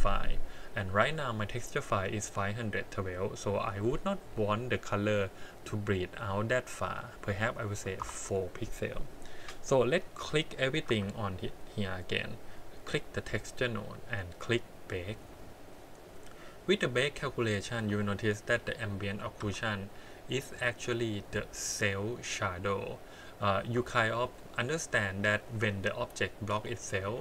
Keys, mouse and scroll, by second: 3.4-6.4 drag, 10.1 click, 10.8 Tab, 11.2 click, 12.7 click, 14.6 click, 17.7 Tab, 18.5 a, 19.4 a, 23.8 Tab, 24.3-25.4 middle drag, 25.6 scroll up 4, 26.2 middle drag.